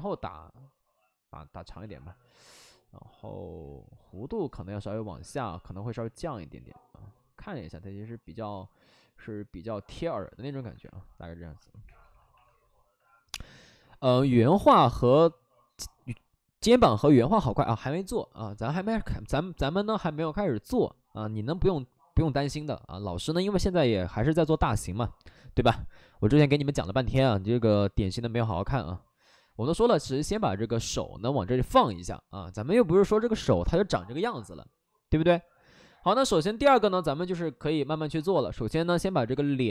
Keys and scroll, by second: 5.0 ctrl+z, 10.4 2, 11.8 2, 11.9 2.